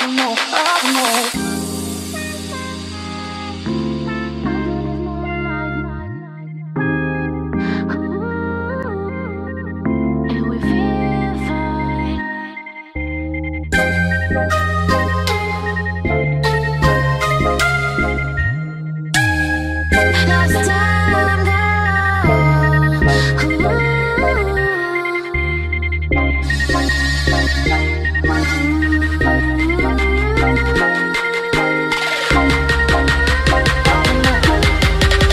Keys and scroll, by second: 15.9 ctrl+z.